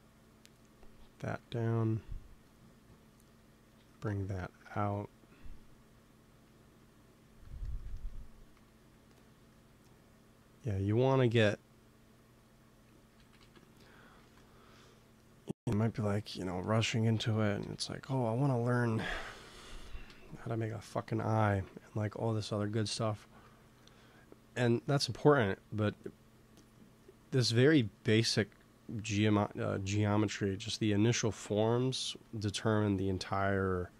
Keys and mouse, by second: 1.2 f, 4.6 ctrl+s, 8.4 f, 9.3 f, 10.0-13.3 drag, 13.1 ctrl+z, 13.3 ctrl+z, 14.1 ctrl+s, 17.5 KP_1, 17.8 KP_3, 18.7 middle click, 20.0 ctrl+s, 23.2-24.6 middle drag, 29.3-31.3 drag, 31.9 f, 32.7 f, 33.3-33.9 drag.